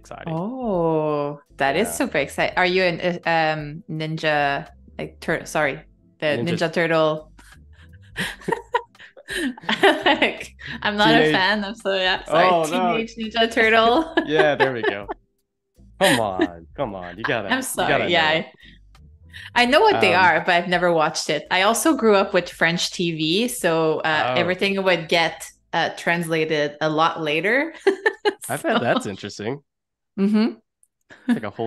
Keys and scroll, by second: 16.4 super+-, 17.3 space, 20.9 shift+b, 23.2 super+=, 23.6 space, 24.9 ].